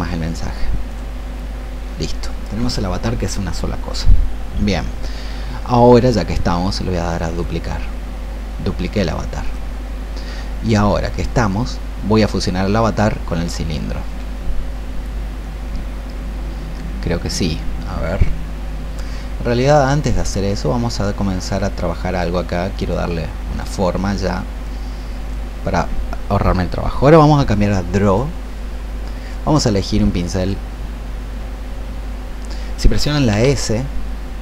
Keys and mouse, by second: 33.2 s.